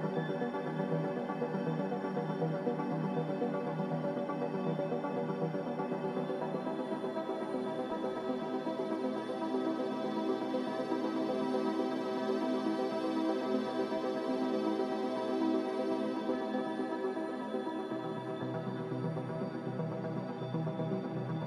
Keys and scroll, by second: 3.7 s, 6.0-8.5 typing, 7.4 Tab, 9.7 Return, 11.7 Delete, 11.7 z, 13.8-14.7 typing, 17.3 n, 18.1 a.